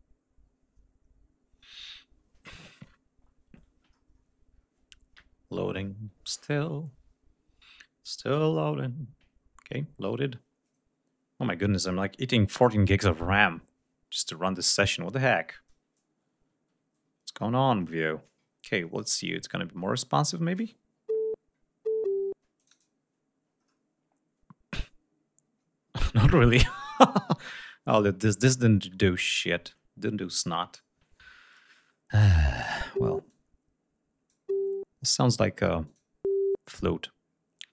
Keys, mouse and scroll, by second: 17.0-17.4 ctrl+scroll up 3, 17.6-17.9 scroll down 2, 18.3-18.8 ctrl+scroll up 4, 19.6-19.9 scroll down 2, 22.4 click, 33.1 click, 35.5 click.